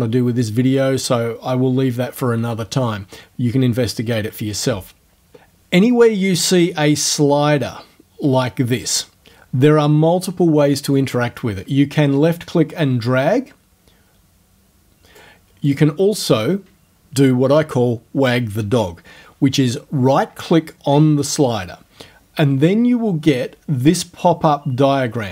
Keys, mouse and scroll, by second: 6.5-11.2 drag, 12.0-15.4 drag, 15.7 right click.